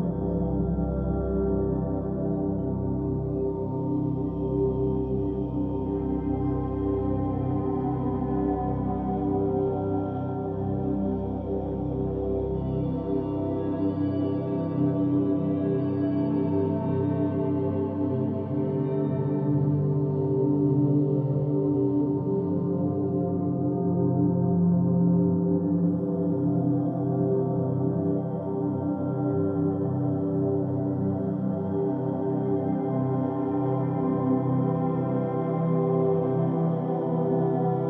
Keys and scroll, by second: 1.9-2.9 typing, 7.0-10.0 typing, 11.1 m, 11.6 p.